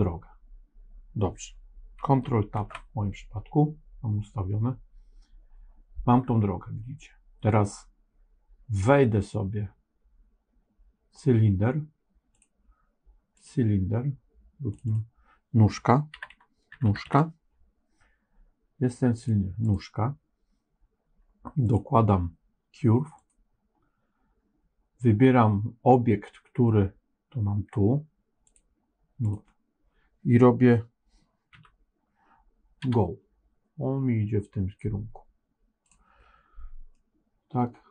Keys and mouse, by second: 2.5 ctrl+Tab, 12.2 click, 14.6 click, 14.8-19.2 drag, 21.6-23.2 drag, 28.5 click, 31.5 KP_1, 32.7 g, 36.8-37.9 middle drag.